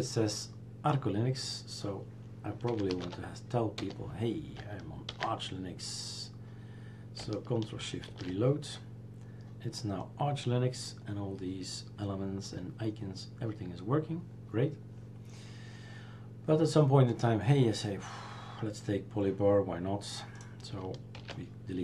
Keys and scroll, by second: 2.7 r, 4.9-6.1 typing, 8.2 shift+super+r, 21.2 shift+super+q.